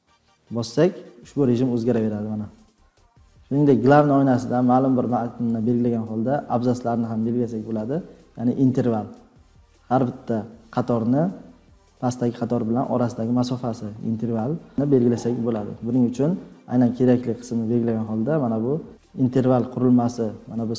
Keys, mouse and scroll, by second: 0.3 F3, 1.7 F3, 3.1-4.4 drag, 5.4-7.0 drag.